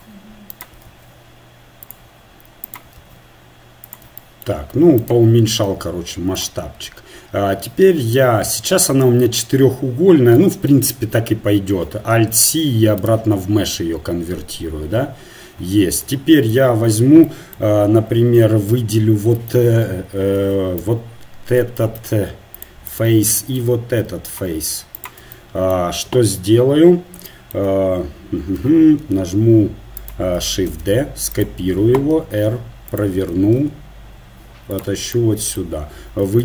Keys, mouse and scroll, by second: 0.9 alt+s, 3.1 alt+s, 5.0-6.3 drag, 5.6 alt+s, 7.5 Tab, 10.7 KP_1, 12.3 alt+c, 13.8 Tab, 14.8 Tab, 18.7 z, 19.5 ctrl+Tab, 20.4 ctrl+Tab, 22.6 ctrl+Tab, 23.3-28.6 drag, 26.6 KP_1, 28.1 right click, 29.1 r, 30.7 shift+d, 32.2 r, 33.6 g.